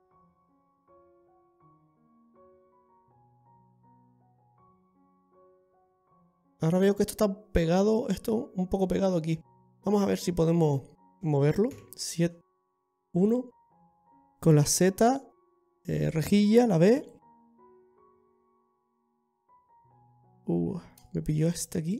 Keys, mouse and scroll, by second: 6.5 scroll down 6.